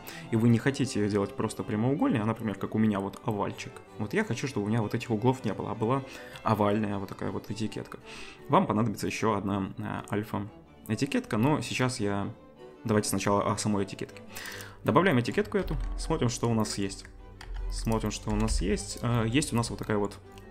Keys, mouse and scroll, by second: 14.6-20.5 middle drag, 15.6 z, 16.9 g, 18.3 g.